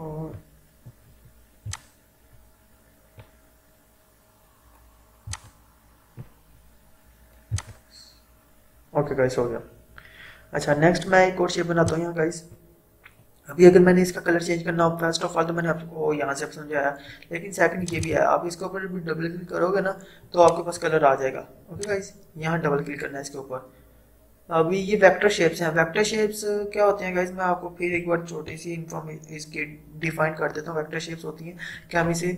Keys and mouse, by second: 11.9-15.2 drag, 17.8 click, 20.4-21.8 drag.